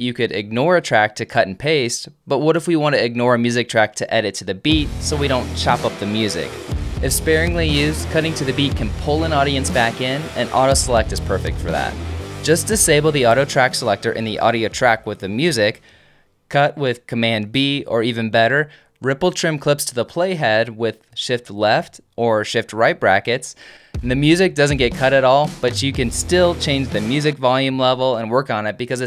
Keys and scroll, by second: 15.7 alt+super+F1, 17.2 super+b, 18.3 super+a, 18.9 Delete, 21.9 t, 22.4 shift+].